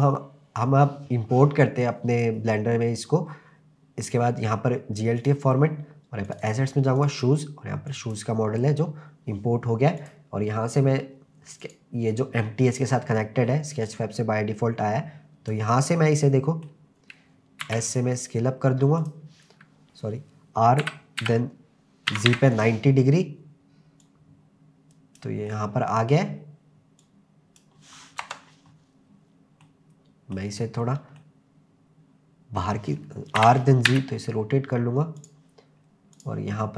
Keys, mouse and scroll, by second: 2.2-5.4 drag, 10.0 click, 11.6 click, 13.0-13.9 scroll down 1, 13.9 click, 16.1 middle click, 17.0-17.6 scroll up 1, 17.6 s, 19.0 click, 19.8 click, 19.8-22.3 typing, 22.6 click, 24.0 click, 25.5 middle click, 27.0 click, 28.2 KP_0, 29.6-30.4 middle drag, 30.8 scroll up 1, 31.2-32.6 middle drag, 33.4 r, 33.9 z, 35.2 click, 36.2 click.